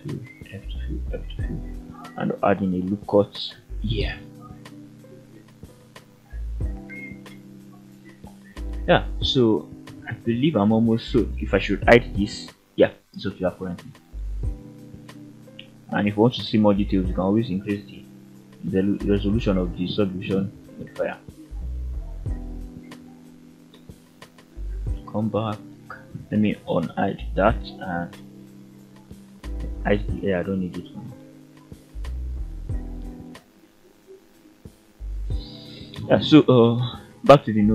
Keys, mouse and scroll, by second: 0.4 f, 0.8 middle click, 1.2 f, 2.2 ctrl+r, 3.8 Escape, 4.1 scroll down 2, 4.4-6.3 middle drag, 6.5 alt+a, 6.9 scroll up 2, 8.9 shift+middle drag, 9.5 middle click, 10.0 scroll down 1, 10.2 Tab, 10.6 middle click, 11.5 click, 12.0 h, 12.5-13.0 middle drag, 13.1-13.6 scroll up 2, 14.2 click, 15.8 click, 16.5 click, 17.0 drag, 18.5 click, 20.4-23.9 middle drag, 24.4-24.7 scroll up 1, 24.7 /, 25.3-25.9 middle drag, 26.1 /, 27.2 alt+h, 27.8 shift+middle drag, 28.2 scroll up 1, 28.3 middle click, 29.7 click, 30.2-30.6 scroll down 2, 30.6 h, 30.8-31.3 scroll down 3, 31.3-31.7 middle drag, 31.9-33.1 scroll up 2, 33.1 click, 33.8 click, 34.3 Tab, 34.7-35.0 middle drag, 35.2-35.5 scroll up 1, 35.7 shift+middle drag, 36.1 scroll up 1, 36.2 middle drag, 36.7-37.1 scroll up 1, 37.3 shift+middle click.